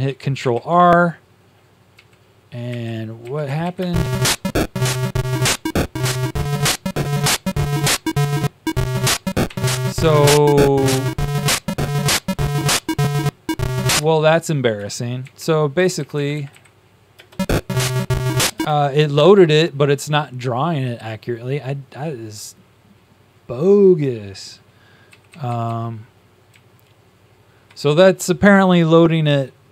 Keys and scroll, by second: 0.3 ctrl+r, 1.8 Down, 3.4 Up, 3.8 Up, 9.4 Tab, 9.7 Down, 10.3 Down, 15.1 shift+Tab, 16.0 Up, 17.1 Up, 25.2 Page_Down, 26.4-27.6 Up.